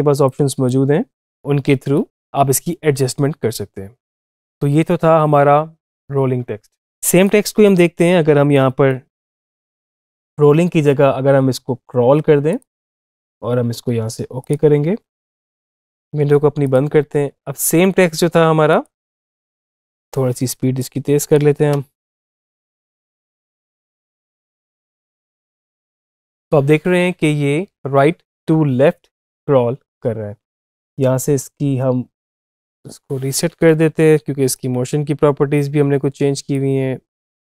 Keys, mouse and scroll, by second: 0.0-7.0 drag, 7.1-9.8 drag, 10.1 click, 12.5 click, 14.2 click, 16.4 click, 19.0 space, 19.8 space, 20.0-21.0 drag, 21.5 space, 30.2 space, 32.2 click, 33.5 -, 34.3 click, 34.5 -, 35.4-37.0 drag, 37.4 typing.